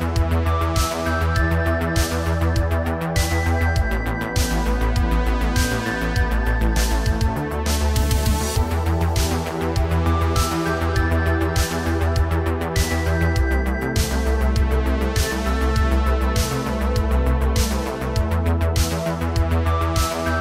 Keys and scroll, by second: 1.8 g, 4.6 g, 6.0 g, 7.4 g, 10.6 space, 13.7 space, 16.4 ctrl+c, 16.7 ctrl+c, 19.1 ctrl+shift+v.